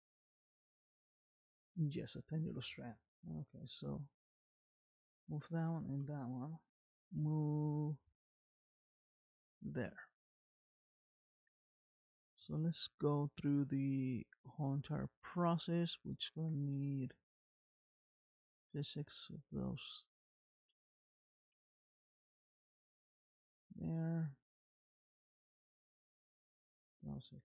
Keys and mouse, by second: 0.3 g, 5.2 shift+click, 6.9 m, 10.1 middle click, 11.3 shift+middle click, 12.1 middle click, 14.0 click, 14.7 r, 16.7 r, 20.5 shift+click, 21.8 m, 23.8 click, 24.8 click, 25.3 r.